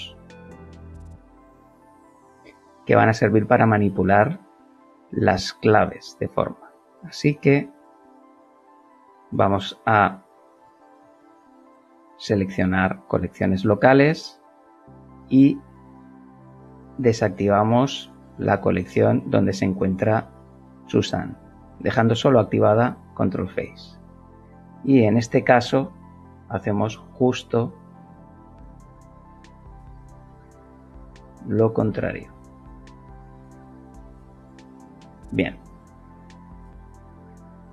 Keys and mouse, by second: 8.3 click, 16.5 click, 25.8 click, 27.8 click, 28.4 middle click, 29.6 click, 31.1 click, 31.8 click, 32.4 click.